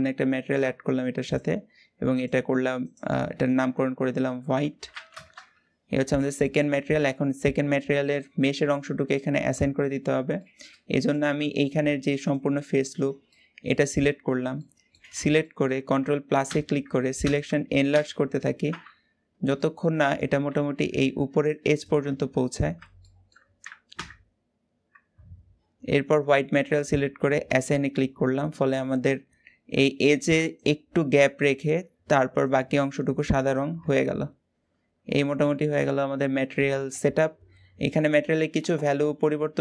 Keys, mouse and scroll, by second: 0.0-1.1 middle drag, 1.1-6.8 drag, 6.8 Tab, 7.2-7.6 scroll up 1, 7.6 middle click, 8.6 click, 8.8 shift+middle click, 9.5-10.2 scroll up 2, 10.2 shift+middle click, 10.8 click, 11.4 alt+shift+click, 12.1 alt+shift+click, 12.7-13.0 scroll down 4, 13.0 middle click, 13.6-14.4 scroll up 6, 14.4 shift+middle click, 14.9 scroll up 2, 15.2-16.3 shift+middle drag, 16.3 ctrl+KP_Add, 17.0 ctrl+KP_Add, 17.7 ctrl+KP_Add, 19.3-22.2 shift+middle drag, 22.2-22.8 scroll up 1, 22.8-23.8 shift+middle drag, 23.8 ctrl+KP_Add, 26.0 click, 27.4-29.0 drag, 29.0-32.1 scroll up 1, 32.1-33.8 scroll up 1, 33.8-34.9 scroll down 5, 34.9 Tab, 35.2-35.6 scroll down 4, 35.6-36.8 middle drag, 36.8-37.4 scroll up 2, 37.8 click.